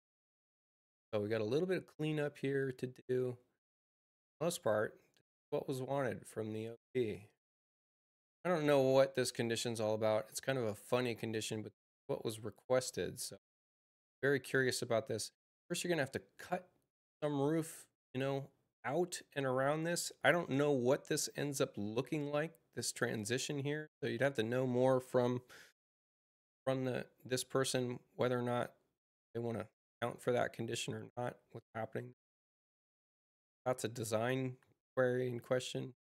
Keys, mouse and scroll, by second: 0.8 click, 27.5 click.